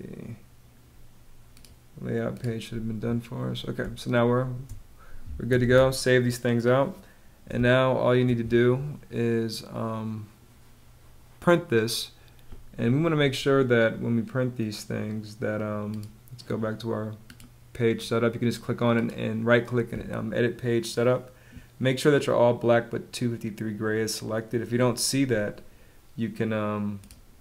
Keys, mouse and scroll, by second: 3.3 space, 5.1 super+s, 7.0 space.